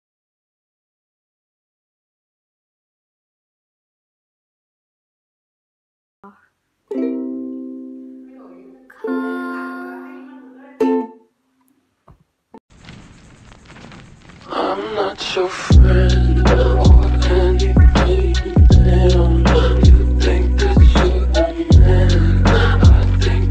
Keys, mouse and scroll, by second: 1.1 p, 3.9 s, 8.0-10.0 typing, 13.0 Tab, 13.0 6, 13.1 6, 13.8 ', 13.8 BackSpace, 14.0 Return.